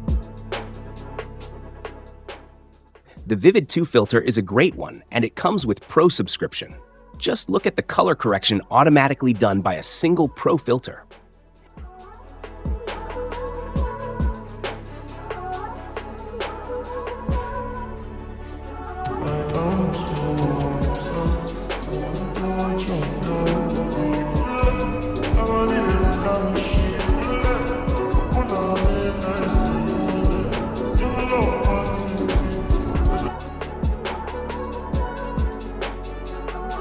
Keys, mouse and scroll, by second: 3.0-4.0 drag, 6.0-7.0 drag, 11.6 click, 13.0-14.0 drag, 14.5 click, 15.7-16.7 drag, 16.8-18.8 drag, 18.8 space, 33.2 space, 36.4-36.8 drag.